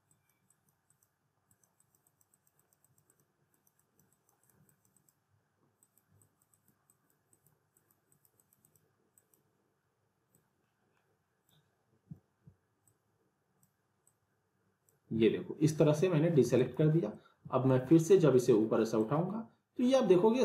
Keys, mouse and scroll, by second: 16.4 alt+w, 16.6 alt+right click, 17.1-17.7 alt+middle click, 19.0-20.4 drag.